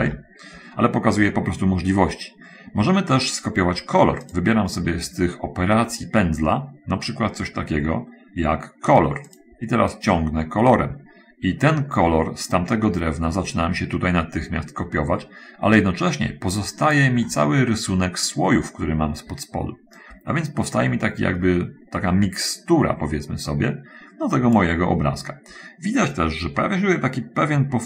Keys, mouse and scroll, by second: 0.3 ctrl+z, 9.4 click, 10.3-17.4 drag, 17.6 middle click, 19.1-19.6 scroll down 1, 20.3-25.0 drag, 25.4-25.7 scroll down 1, 27.0 scroll down 1, 27.6 middle click.